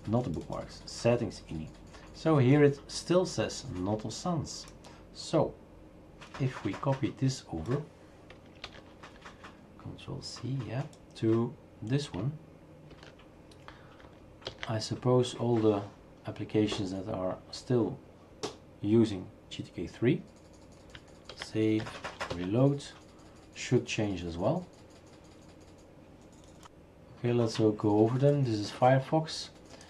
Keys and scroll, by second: 8.7 ctrl+c, 12.9 ctrl+v, 14.5 ctrl+s, 21.3 ctrl+s, 22.3 shift+super+r, 22.8 ctrl+s, 22.8 shift+super+r.